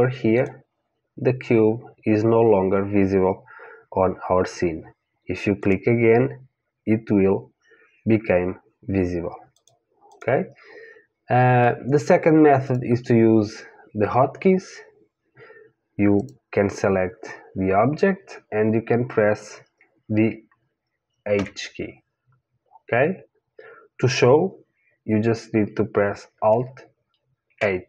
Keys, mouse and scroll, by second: 0.4 click, 5.6 click, 9.5 click, 12.7 click, 16.2 click, 21.4 h, 27.5 alt+h.